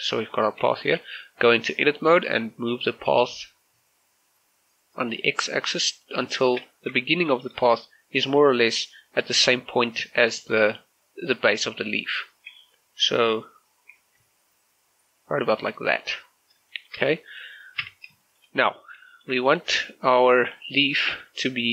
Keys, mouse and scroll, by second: 0.8 shift+middle click, 1.1-1.5 scroll up 1, 1.6 Tab, 2.4-6.4 drag, 6.4 shift+middle click, 6.6 scroll up 1, 7.1 shift+middle click, 7.4-9.3 shift+scroll up 1, 14.0 g, 14.3 x, 15.6 click, 16.0-16.6 scroll down 1, 16.8 shift+middle click, 17.0-17.5 scroll up 1, 17.9 Tab, 18.3 shift+middle click, 18.9 scroll up 1, 19.2 shift+middle click, 19.6 right click.